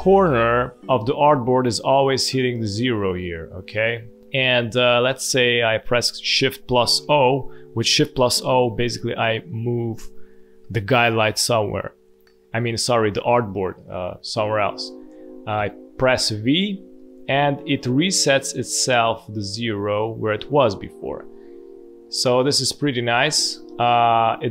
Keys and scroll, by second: 1.2 space, 4.2 space, 6.9 shift+o, 14.4 space, 15.5 v, 16.9 space, 22.0 space, 23.5 ctrl+z.